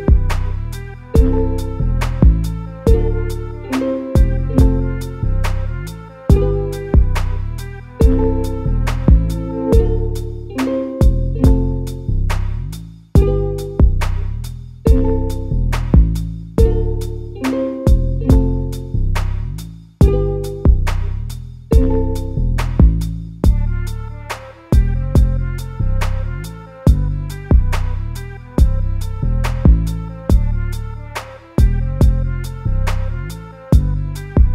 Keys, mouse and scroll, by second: 0.1 ctrl+x, 0.6 middle click, 1.3 click, 1.5 click, 1.8 s, 3.0 click, 3.2 click, 3.5 s, 4.2 a, 4.3 a, 4.7 middle click, 5.7 click, 6.2-6.8 scroll up 2, 6.8 alt+s, 8.6 scroll down 2, 8.8-10.1 middle drag, 10.1 Tab, 10.3 scroll down 2, 10.4 a, 10.6 a, 10.9-11.8 middle drag, 11.8-12.3 scroll up 1, 12.3 shift+middle click, 12.7-13.1 scroll up 2, 13.1-17.7 middle drag, 17.7 shift+a, 23.3 ctrl+alt+KP_0.